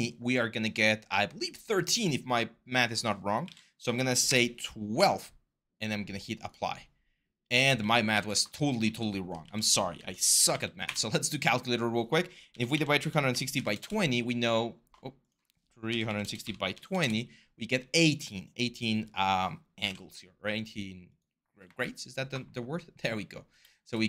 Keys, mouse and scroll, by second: 2.9-5.2 typing, 7.5 ctrl+z, 7.9 ctrl+z, 8.6 ctrl+z, 9.2 ctrl+z, 9.7-10.8 typing, 12.0-14.0 typing, 15.4-17.2 typing, 19.3-20.1 typing.